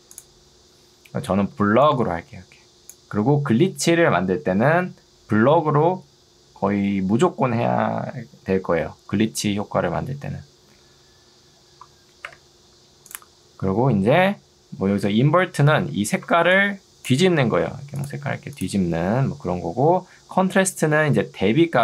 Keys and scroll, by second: 1.6 ctrl+2, 12.4 Escape, 15.2 ctrl+2, 15.8 Escape, 16.4 ctrl+2, 17.4 Escape, 21.6 2.